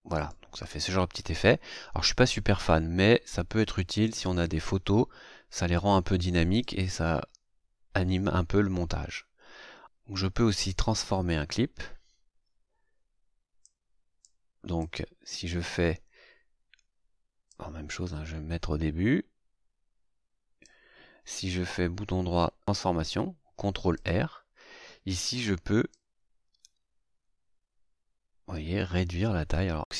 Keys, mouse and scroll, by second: 0.1 click, 4.0 click, 6.5 click, 13.6-14.4 drag, 14.7 click, 17.4-20.8 drag, 21.5 right click, 23.9 click, 25.9-29.8 drag.